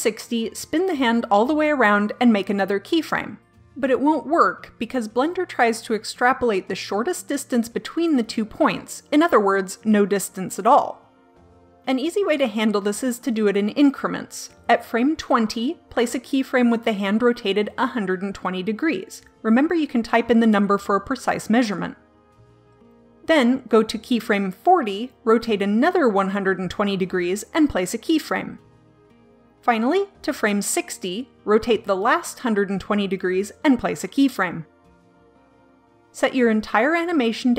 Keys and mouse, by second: 0.9 r, 4.1-8.0 drag, 14.2-15.5 drag, 18.9 r, 22.4 click, 23.3-24.4 drag, 25.5 r, 28.7-30.0 drag, 31.0-33.2 drag, 33.2 r, 35.3 click, 36.8-37.5 drag.